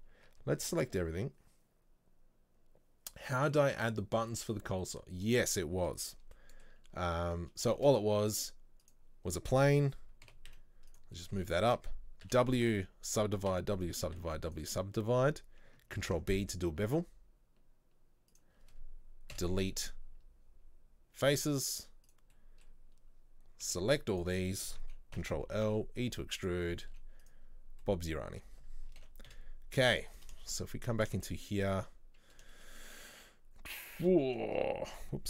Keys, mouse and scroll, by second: 0.3 a, 5.0 scroll down 1, 6.4-9.0 middle drag, 9.0 shift+a, 10.4 g, 11.2-13.2 shift+middle drag, 13.2 w, 13.9 w, 15.2-16.1 scroll up 2, 16.1 ctrl+b, 22.2 Delete, 22.4-24.3 middle drag, 24.3 b, 25.2 ctrl+l, 25.6 e, 26.7 middle click, 27.0 z, 27.5-27.9 scroll down 1, 27.9-29.1 middle drag, 29.1 ctrl+l, 30.2 Delete, 30.5 shift+middle click, 30.8-31.2 scroll up 1, 31.2-34.3 shift+middle drag, 34.3 ctrl+z.